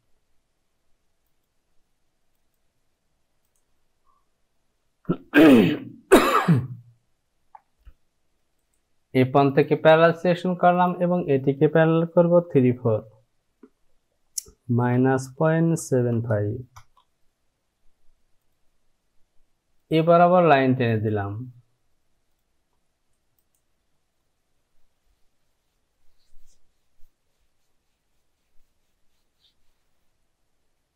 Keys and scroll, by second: 5.2 Home, 14.0 Down, 14.7 KP_Subtract, 15.3 KP_Decimal, 15.8 KP_7, 16.8 KP_5.